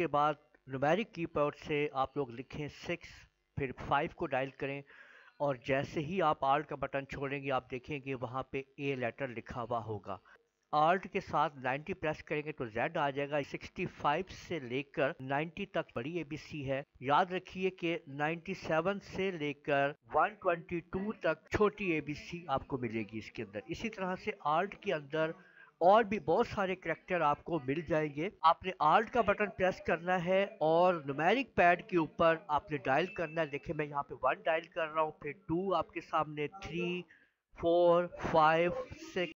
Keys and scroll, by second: 2.6 alt+6, 3.8 alt+5, 10.3 BackSpace, 11.2 alt+9, 11.5 alt+0, 13.4-21.4 typing, 28.4 BackSpace, 34.2 alt+1, 35.3 alt+2, 36.3 alt+3, 37.0 alt+3, 37.3 alt+4, 37.9 alt+4, 38.0 alt+5, 39.0 alt+6.